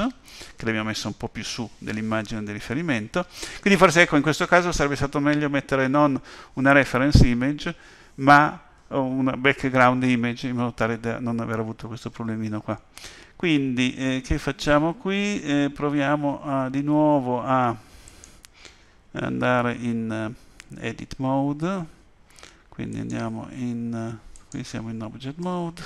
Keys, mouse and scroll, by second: 18.0 click, 20.4 Tab, 22.9 click, 25.4 Tab.